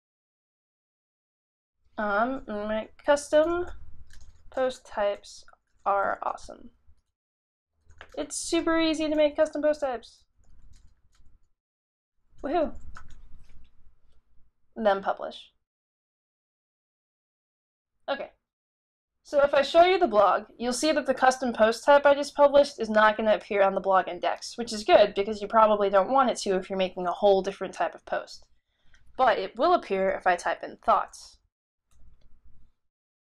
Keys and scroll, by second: 2.7-13.0 typing, 14.1 typing, 30.4-32.1 typing.